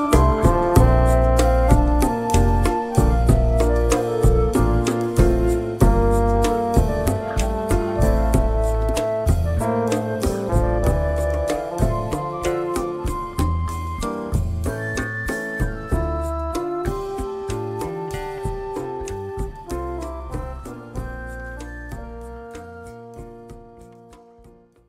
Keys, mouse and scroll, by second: 1.3-2.9 drag, 4.4 ctrl+g, 5.0 ctrl+click, 8.8 space, 10.9 KP_Add, 12.0 space.